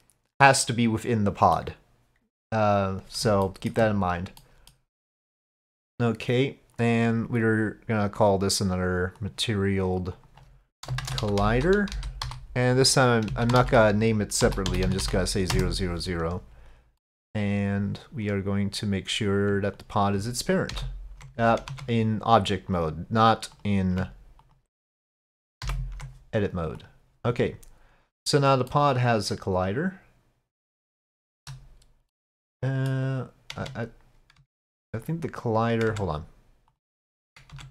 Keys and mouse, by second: 0.7-1.7 middle drag, 3.5 shift+middle click, 4.5 middle click, 8.2-9.4 drag, 10.1 click, 10.9 shift+middle click, 11.2-16.4 drag, 14.9 0, 15.0 0, 17.0 middle click, 19.7 ctrl+click, 20.7 ctrl+p, 21.7 Tab, 23.6 click, 24.4 ctrl+click, 25.7 ctrl+p, 28.8-30.9 middle drag, 31.2-31.5 shift+middle drag, 32.1-32.9 middle drag, 33.6 Tab, 34.4 Tab, 35.0 click, 35.9 Tab, 36.7 click, 37.6 Tab.